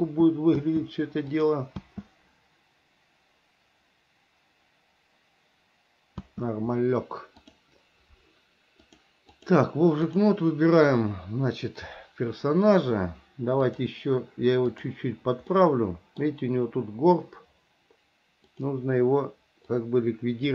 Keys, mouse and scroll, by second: 0.2 space, 1.6 click, 2.0 space, 6.4 space, 9.0 click, 10.3 click, 13.8-15.2 drag, 15.8 middle click, 18.7 click, 20.0 click.